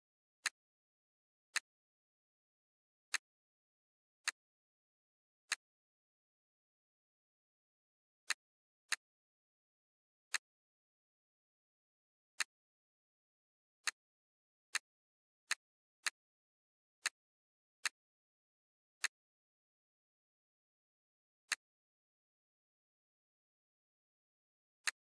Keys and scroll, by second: 11.0 BackSpace, 16.2 BackSpace, 17.5 BackSpace, 20.3 Delete.